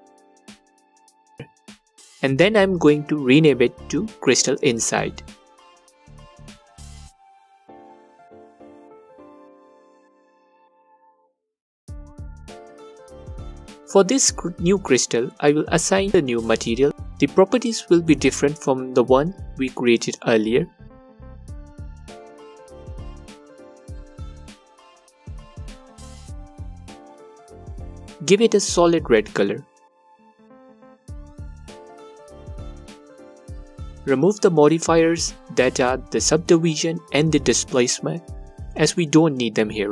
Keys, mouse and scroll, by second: 8.0 Return, 17.9-19.2 drag, 20.2 click, 23.0 click, 30.7-39.9 alt+drag.